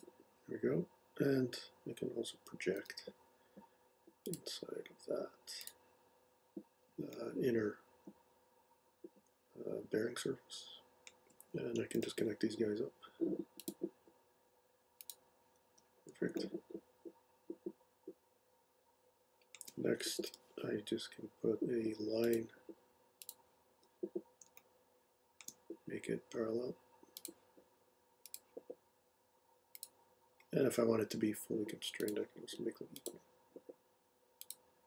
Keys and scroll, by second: 2.8 p, 12.0 l, 15.7 ↻, 20.3 l, 23.7 ⟲.